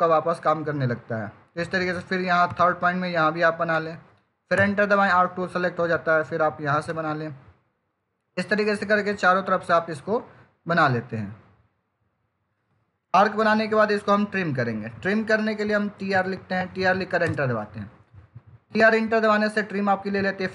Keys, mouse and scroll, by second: 2.3 click, 4.4 Return, 6.7 click, 12.4 click, 15.7 typing, 17.1 Return.